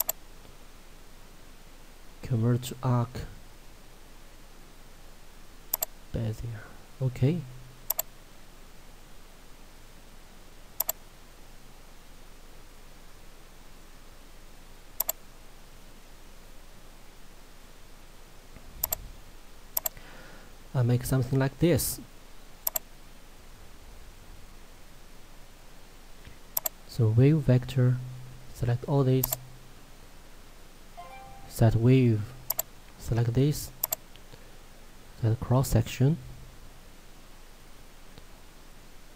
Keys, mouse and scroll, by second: 0.1 right click, 5.8 click, 20.4 scroll down 1, 22.0 click, 26.6 click, 32.6 click, 37.2 middle click, 38.5 scroll up 1.